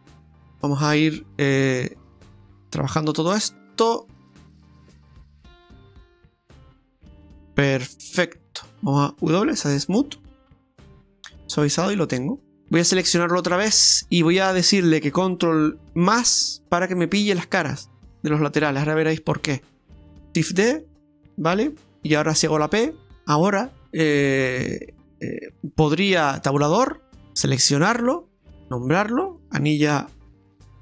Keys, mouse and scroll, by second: 0.4 click, 0.9 click, 1.9 right click, 2.9 click, 3.5-4.2 scroll up 2, 4.2 middle click, 4.9 right click, 5.4 middle click, 8.1 right click, 8.5-9.0 scroll down 4, 9.3 w, 11.3 middle click, 12.5 ctrl+shift+z, 12.9 alt+shift+right click, 13.7 middle click, 16.2 ctrl+KP_Add, 20.1 middle click, 20.6 shift+d, 22.5 shift+d, 22.5 p, 23.1 middle click, 24.9 right click, 26.5 Tab, 27.5 right click, 29.1 click, 29.3 click.